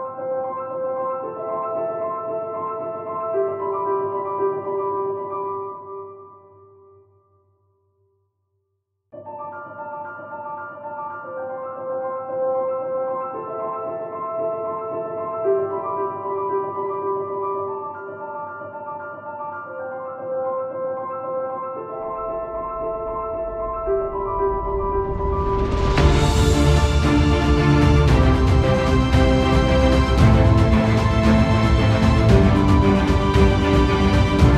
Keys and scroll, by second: 12.6 ctrl+=, 13.0 ctrl+0, 25.2 ctrl+0, 25.5 ctrl+t.